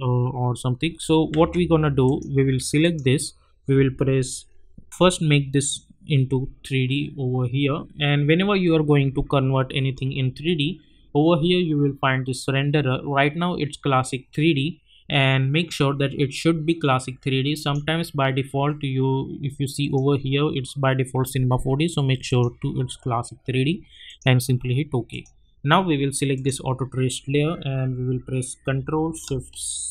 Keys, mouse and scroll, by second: 1.1 click, 1.3 ctrl+z, 2.0 click, 5.6 click, 17.5 click, 19.8 click, 22.2 click.